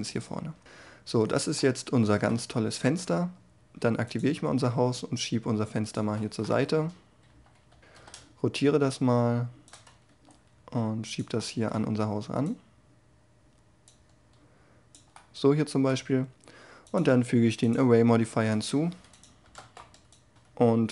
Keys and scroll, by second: 6.8 3, 7.7 1, 7.9 r, 10.1 g, 19.5 0, 19.5 Return.